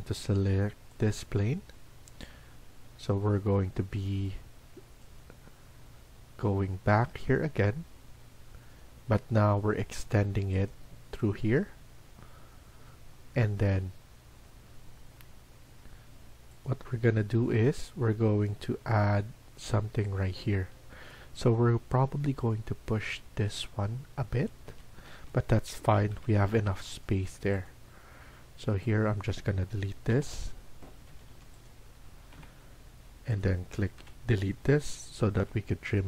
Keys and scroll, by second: 10.9 Escape, 20.4 Escape, 20.9 Escape, 24.6 Escape, 24.9 Escape, 25.1 Escape, 25.7-26.5 typing, 30.0 Delete, 30.7-31.5 typing, 32.2 Delete, 33.9 Delete, 35.0-35.8 typing.